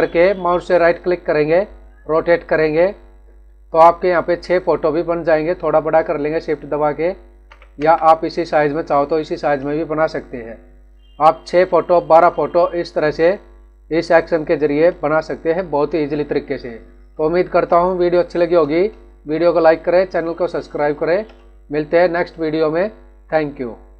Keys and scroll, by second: 8.4 Left.